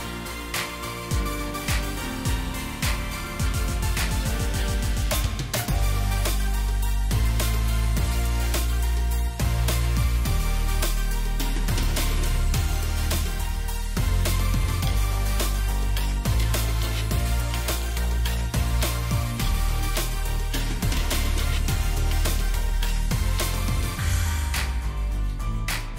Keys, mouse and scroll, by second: 0.6 double click, 1.3 Delete, 1.7 Delete, 11.1 shift+click, 13.2 right click, 13.8 double click, 14.1 alt+scroll up 1, 15.9 alt+click, 19.6 ctrl+d, 19.8 ctrl+d, 22.8 shift+click, 23.5 shift+click.